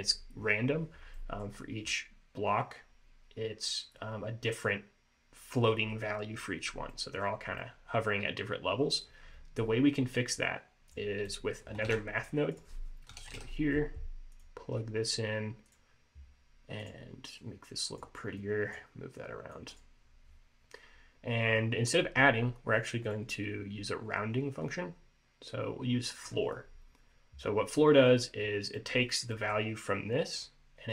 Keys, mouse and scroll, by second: 1.3 middle click, 7.0 scroll down 1, 7.1 middle click, 7.7 middle click, 10.6 click, 11.4 click, 12.0 shift+a, 16.9 click, 17.5 click, 18.5 click, 19.3 click, 19.8 click, 21.6-22.9 scroll up 2, 23.2 click, 28.6 scroll down 2, 28.9 middle click, 29.4 middle click.